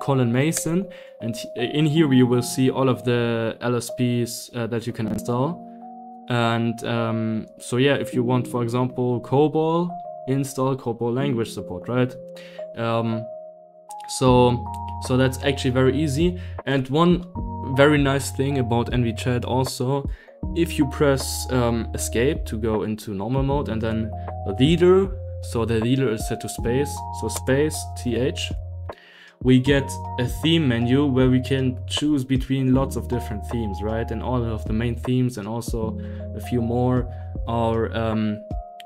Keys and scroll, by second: 0.5 Return, 1.6 Down, 2.2 Down, 2.3-5.5 Down, 6.0 Up, 6.4 Up, 7.0 Up, 7.7 Down, 8.3 Down, 8.6 Up, 8.8 Up, 9.1 Down, 9.3 Down, 15.4 Escape, 15.7 Escape, 15.9 Escape, 21.9 Escape, 27.3 space, 29.6 Down, 30.6-32.7 typing, 33.5 Down, 33.8 Down, 34.7 Up, 36.2 Down, 36.8 Up, 37.1-37.9 typing, 38.5 Up.